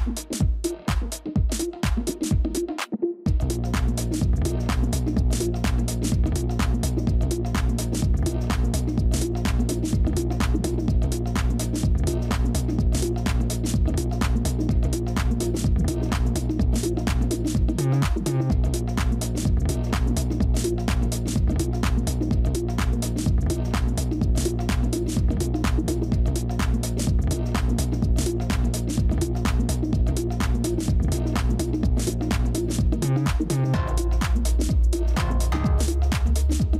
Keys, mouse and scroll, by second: 4.9 alt+click, 8.0 shift+click, 16.4 ctrl++, 16.6 ctrl++, 17.3 space, 19.2 ctrl+-, 19.3 ctrl+-, 19.5 ctrl+-, 30.3 Delete.